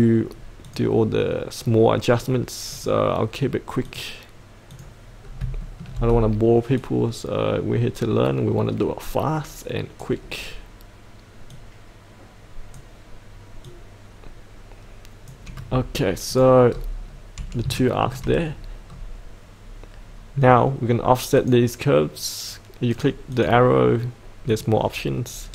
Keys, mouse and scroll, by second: 5.2 scroll down 1, 5.6 shift+middle click, 6.1-6.8 scroll down 1, 6.8-15.6 drag, 16.6-17.6 scroll up 1, 17.7 shift+middle click, 18.8-21.4 scroll down 1, 21.4 click, 25.3-25.5 scroll up 1.